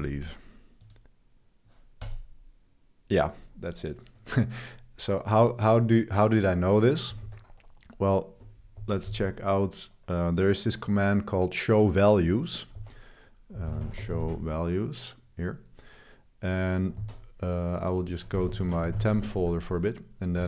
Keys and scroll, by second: 7.2 super+3, 7.5 super+3, 8.7 ctrl+b, 8.8-9.5 typing, 12.8 ctrl+r, 13.3-14.9 typing, 17.0 ctrl+c, 17.8-20.4 typing.